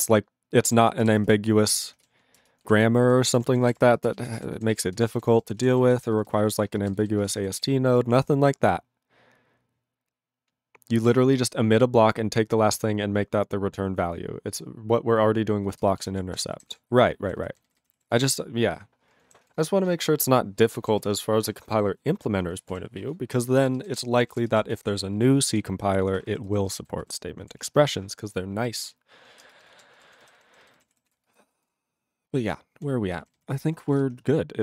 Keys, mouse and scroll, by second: 0.8 ctrl+s, 2.2 ctrl+s, 2.4 ctrl+space, 2.8 ctrl+alt+b, 3.0 ctrl+g, 3.4 ctrl+s, 3.5 ctrl+p, 3.7 ctrl+p, 3.7 ctrl+e, 3.9 ctrl+space, 4.3 ctrl+alt+b, 4.4 ctrl+g, 4.7 ctrl+s, 4.9 ctrl+space, 5.3 ctrl+alt+f, 5.4 ctrl+g, 5.8 ctrl+s, 5.9 ctrl+n, 6.0 ctrl+n, 6.1 ctrl+n, 6.3 ctrl+n, 6.4 ctrl+n, 6.7 ctrl+space, 7.1 ctrl+alt+b, 7.2 ctrl+g, 7.6 ctrl+s, 15.8 ctrl+space, 16.2 ctrl+alt+f, 16.4 ctrl+g, 16.7 ctrl+s, 16.9 ctrl+n, 17.2 ctrl+n, 17.4 ctrl+n, 17.5 ctrl+n, 17.7 ctrl+n, 18.1 ctrl+s, 19.5 ctrl+s, 21.0 ctrl+s, 22.8 ctrl+s, 23.5 ctrl+space, 23.9 ctrl+alt+b, 24.0 ctrl+g, 24.3 ctrl+s, 24.4 ctrl+space, 24.8 ctrl+alt+f, 25.2 ctrl+g, 25.5 ctrl+s, 25.6 ctrl+n, 25.8 ctrl+n, 26.0 ctrl+n, 26.2 ctrl+n, 26.5 ctrl+space, 26.9 ctrl+alt+b, 27.0 ctrl+g, 27.6 ctrl+s, 29.5 ctrl+space, 29.8 ctrl+alt+f, 30.0 ctrl+g, 30.1 ctrl+n, 30.2 ctrl+n, 30.4 ctrl+n, 30.5 ctrl+n, 30.6 ctrl+n, 31.1 ctrl+s, 31.2 ctrl+space, 31.6 ctrl+alt+b, 31.7 ctrl+g, 31.9 ctrl+a, 32.1-32.8 ctrl+n, 33.1 ctrl+n, 33.2 ctrl+e, 33.3 ctrl+n, 33.4 ctrl+n, 33.9 ctrl+s.